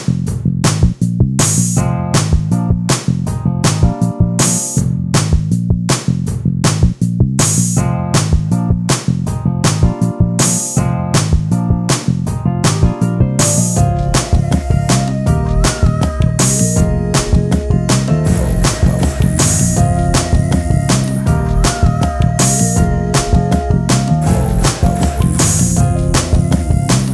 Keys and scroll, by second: 2.2 e, 4.1 d, 5.7 space, 24.2 ctrl+space.